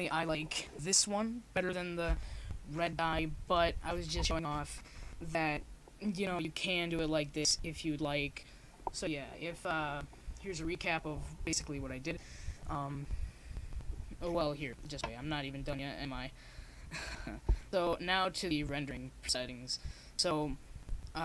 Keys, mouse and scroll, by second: 9.9-11.0 drag, 14.7-16.3 middle drag, 17.8-19.5 drag.